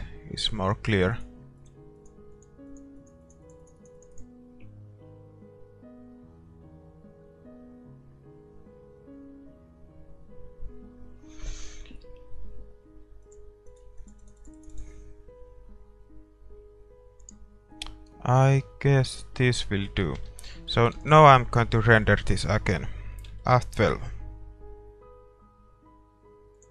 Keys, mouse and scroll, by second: 1.2-6.2 drag, 13.3-16.8 drag, 17.4-20.1 drag, 20.1 shift+z, 20.4 middle click, 21.7-22.8 middle drag.